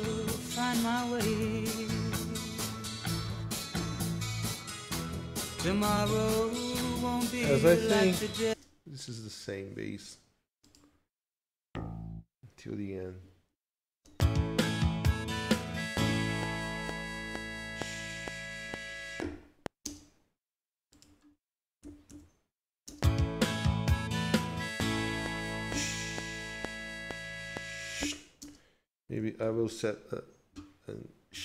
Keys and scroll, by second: 8.6 ctrl+space, 13.5 Left, 14.1 space, 14.5 F7, 19.9 space, 21.9 q, 22.1 Return, 22.9 space, 25.7 =, 28.0 =, 28.4 space, 29.4 ctrl+s.